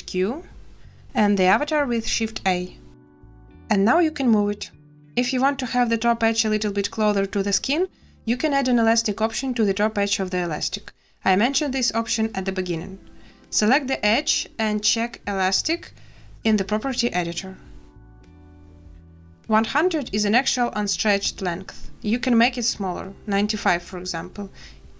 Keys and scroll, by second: 1.7 shift+a, 8.9 space, 11.5 z, 19.5 0, 19.7 0, 19.9 Return, 22.0 space, 23.7 9, 23.9 5, 24.4 Return.